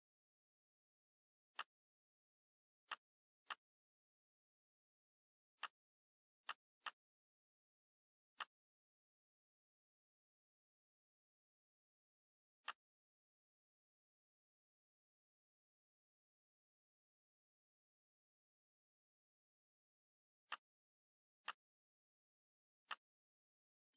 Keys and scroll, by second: 11.5 ctrl+d.